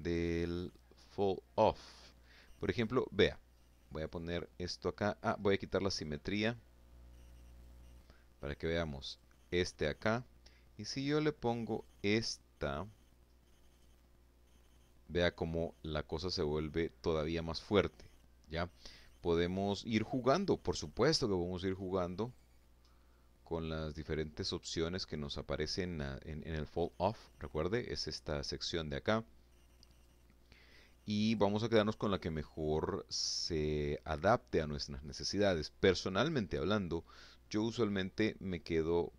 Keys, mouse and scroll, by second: 0.2-0.8 scroll down 2, 2.1-3.1 drag, 4.4 click, 6.0 click, 7.6 click, 10.2 click, 10.7 middle click, 12.2 click, 14.1 middle click, 15.8 scroll down 1, 19.2 click, 19.8 middle click, 20.8 click, 21.4 middle click, 22.6 middle click, 28.4 click, 28.8 middle click, 29.8 click, 30.9 middle click, 32.1 middle click.